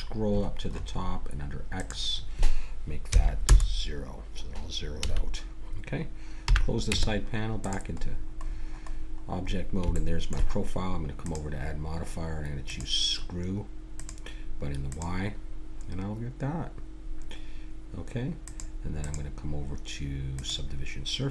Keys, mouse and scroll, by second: 1.7-3.6 drag, 5.0 a, 6.5 n, 6.9 Tab, 8.0 middle click, 8.5-9.8 middle drag, 11.2-15.7 drag, 18.4-21.3 drag.